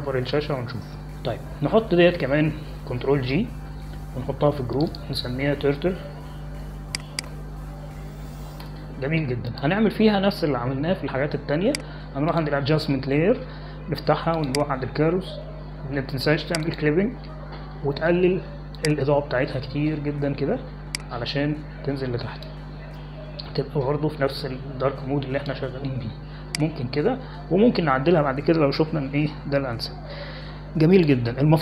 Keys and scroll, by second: 5.4 ctrl+g, 8.2-9.8 typing, 10.6 Return.